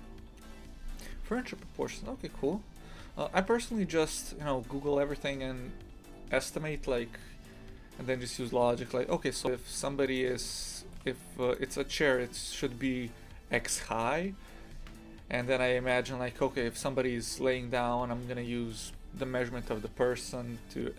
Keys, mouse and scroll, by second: 9.6-10.1 scroll up 1, 10.1 right click, 10.9 g, 18.3-20.9 scroll up 2.